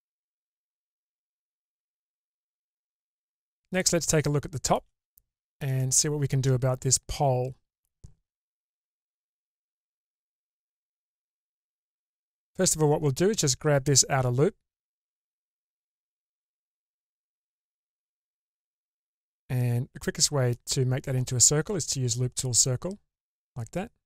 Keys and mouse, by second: 3.6 middle click, 5.1 middle click, 6.0 shift+middle click, 8.5 1, 12.3 2, 13.9 shift+click, 14.5 shift+click, 15.8-18.6 shift+drag, 19.0-20.5 middle drag, 23.5-24.0 middle drag.